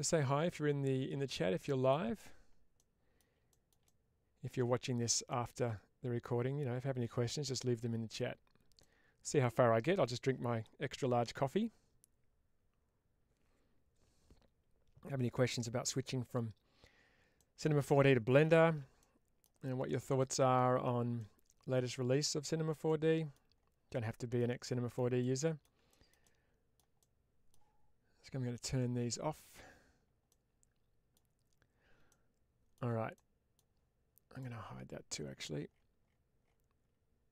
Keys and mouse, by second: 2.6-3.0 middle drag, 3.4 shift+middle click, 3.7-4.4 middle drag, 5.1-8.0 middle drag, 8.7 middle click, 17.2-17.6 middle drag, 18.4 shift+space, 18.9 middle click, 20.1-20.4 middle drag, 21.0-22.1 middle drag, 22.7-23.2 middle drag, 23.8-24.2 middle drag, 24.5-24.8 shift+middle drag, 25.1-25.5 middle drag, 25.8 shift+middle drag, 26.1-26.6 middle drag, 26.9 middle click, 28.6 click, 30.1-31.0 middle drag, 31.9-32.6 shift+middle drag, 33.0 middle click, 34.2 click.